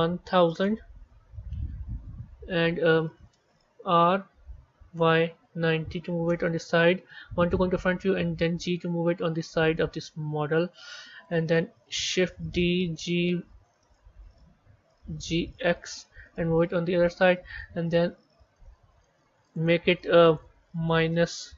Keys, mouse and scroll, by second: 1.6-2.2 scroll down 3, 2.2-3.4 scroll up 3, 3.6 r, 7.2 KP_1, 8.3 g, 12.5 shift+d, 15.2 g, 19.3 click, 20.2-21.5 drag.